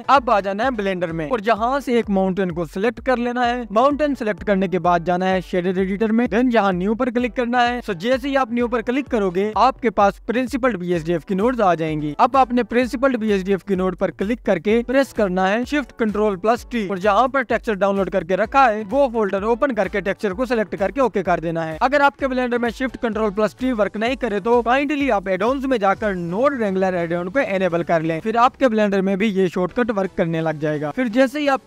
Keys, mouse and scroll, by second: 0.0-1.8 scroll up 3, 1.9-2.4 scroll up 1, 2.4 click, 2.7-4.0 scroll down 2, 4.0-5.3 scroll down 2, 5.3 click, 6.7-11.8 drag, 13.8 click, 16.0 ctrl+shift+t.